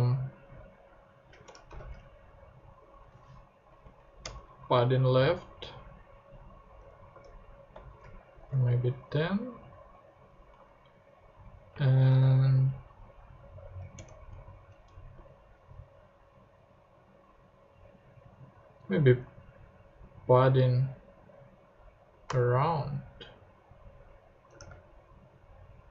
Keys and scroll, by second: 1.4-2.3 typing, 3.7 Down, 4.2 Return, 6.8-9.0 typing, 9.0 super+0, 9.1 super+Tab, 10.5 super+Tab, 11.7-12.6 typing, 13.9 Return, 14.9 BackSpace, 22.3 BackSpace, 24.6 super+Tab.